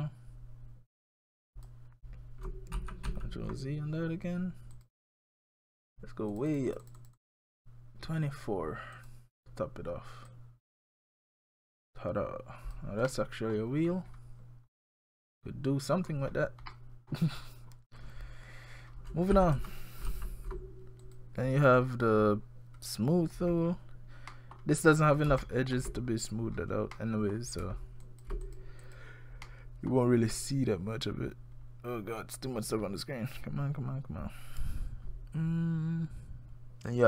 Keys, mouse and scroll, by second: 2.8 ctrl+z, 3.1 ctrl+z, 4.7 click, 6.3 click, 6.5-7.0 click, 6.7 click, 6.8 click, 7.2 click, 9.0 click, 13.1 middle click, 13.8-14.5 scroll down 11, 14.7-15.3 scroll up 5, 15.3-16.0 scroll down 2, 16.0-16.7 scroll up 8, 16.7 middle click, 17.4-17.7 scroll down 2, 18.2-18.8 scroll down 1, 19.3 ctrl+z, 19.6 ctrl+z, 20.1 ctrl+z, 21.0 click, 22.4 scroll up 1, 23.1-23.4 scroll up 3, 24.3 middle click, 24.8-25.2 scroll up 4, 25.4 shift+middle click, 26.0 scroll up 3, 26.5-27.3 scroll down 4, 27.0 middle click, 27.7 shift+scroll up 1, 27.8 shift+scroll down 1, 28.0 shift+click, 28.5 click, 28.8 click, 29.4 scroll up 1, 29.7 middle click, 29.9-30.2 scroll down 1, 31.7 scroll down 1, 36.9 click.